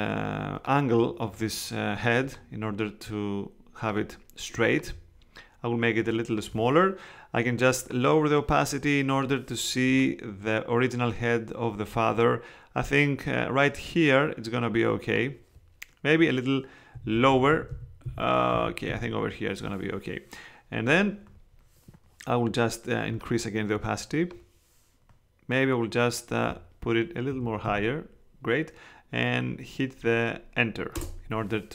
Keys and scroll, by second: 16.9 Down, 30.9 Return.